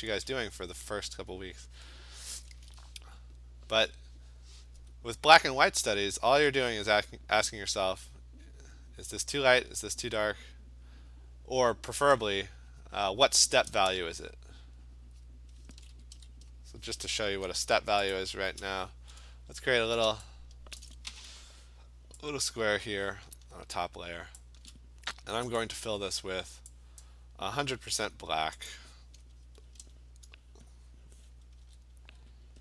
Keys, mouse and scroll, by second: 0.1 click, 1.3 click, 1.8 click, 4.8 alt+click, 5.1 alt+click, 5.7 click, 6.7 click, 8.1 click, 9.2 click, 10.2 click, 10.5 click, 10.9 click, 11.1 click, 12.1 click, 12.2 click, 12.9 click, 13.2 ], 13.5 ], 13.7 ], 13.9 ], 14.6 click, 15.3 click, 15.6 click, 15.7 [, 15.9 [, 16.1 [, 16.3 click, 16.6 click, 16.9 click, 18.1 click, 19.7 alt+scroll, 20.3-22.0 middle click, 20.6 scroll, 20.8 click, 21.3 m, 24.4 shift+click, 25.6 click, 27.0 click, 28.7 click, 29.6 alt+BackSpace, 31.6 ctrl+f.